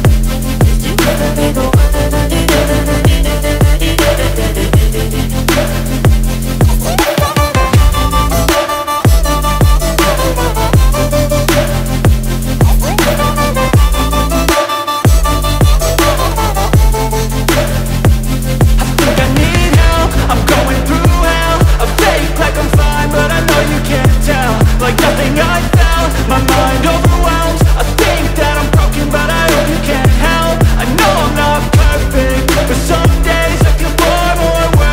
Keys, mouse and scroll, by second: 0.2 shift+Tab, 2.0 click, 2.9 Tab, 3.4 shift+Tab, 3.5 typing, 5.9 click, 13.2 click, 13.3 click, 16.1 Tab, 17.8 ctrl+a, 18.6 Tab, 20.2 click, 21.1 Tab, 22.8 click, 22.8 click, 22.8 typing, 27.8 click, 31.6 click, 32.0-32.8 typing, 32.5 click.